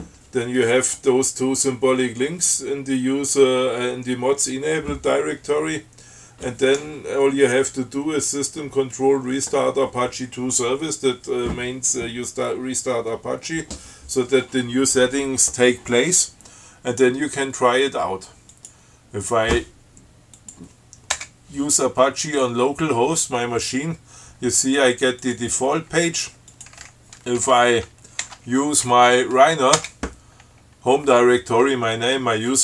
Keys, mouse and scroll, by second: 18.8 click, 20.6 click, 21.4 Return, 25.5 click, 26.7 click, 27.6 shift+7, 30.0 Return.